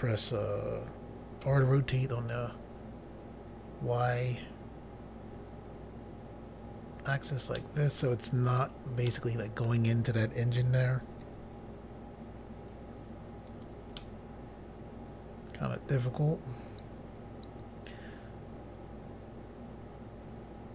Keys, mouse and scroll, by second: 1.4 r, 2.3 y, 7.1 click, 7.3 click, 7.5 middle click, 9.1 middle click, 10.6 r, 11.2 y, 13.5 click, 13.6 click, 14.0 middle click.